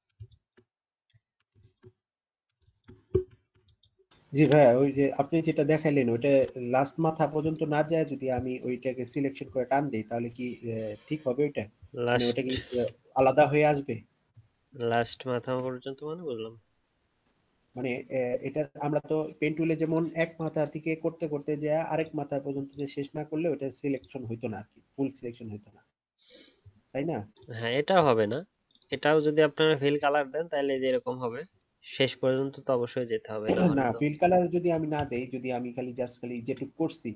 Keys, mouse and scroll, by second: 1.1-3.4 alt+scroll up 1, 3.4-5.7 alt+scroll down 1, 12.7 ctrl+z, 14.5 ctrl+z, 14.5-15.1 alt+scroll up 1, 34.9 ctrl+z.